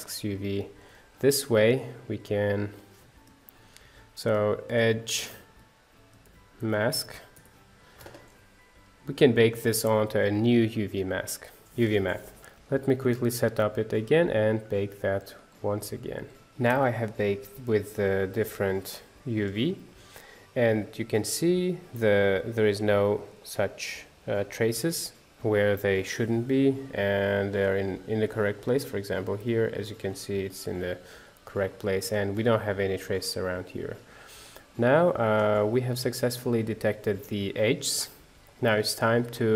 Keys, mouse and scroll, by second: 16.5 middle click, 16.6-16.9 scroll up 1, 16.9 shift+middle click, 17.8-18.5 scroll up 1, 18.5 click, 19.5-21.1 drag, 21.1-26.0 middle drag, 27.0 scroll up 4, 27.2 middle click, 27.6 scroll down 2, 28.5 click, 29.3 h, 30.6 ctrl+z, 31.0 scroll down 4, 31.2 middle click, 32.2-33.3 scroll up 3, 33.3 scroll down 3, 33.5-35.6 middle drag, 35.6 click.